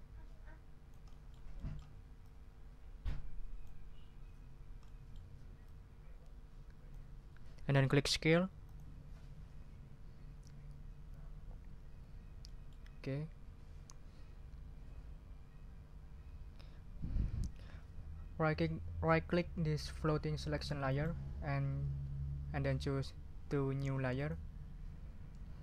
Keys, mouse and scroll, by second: 1.5 click, 2.2-3.8 drag, 4.3 ctrl+scroll up 2, 4.8 ctrl+middle click, 5.1 click, 5.6-7.1 drag, 8.6 click, 12.0 ctrl+scroll down 2, 12.5 ctrl+right click, 20.9 right click, 24.2 click.